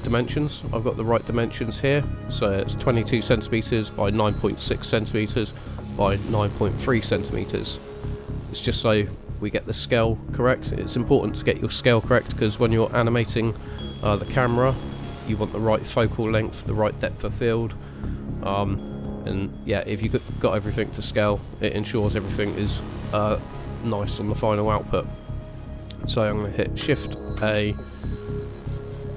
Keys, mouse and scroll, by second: 9.7-11.0 scroll up 3, 22.9 middle click, 27.3 shift+a.